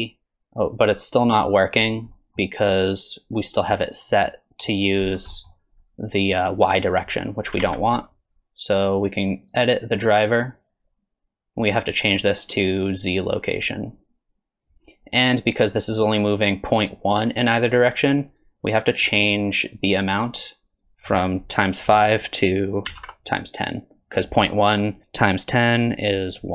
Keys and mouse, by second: 2.1 middle click, 3.0-5.1 drag, 5.3 middle click, 7.6 ctrl+Tab, 7.9 right click, 9.6-14.8 right drag, 18.3-26.5 right drag.